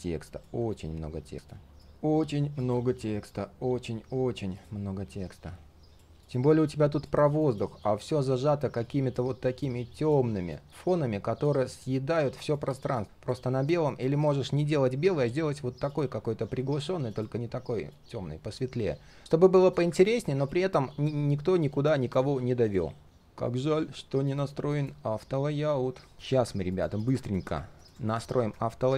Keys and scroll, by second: 19.2 ctrl+z, 26.1 ctrl+z.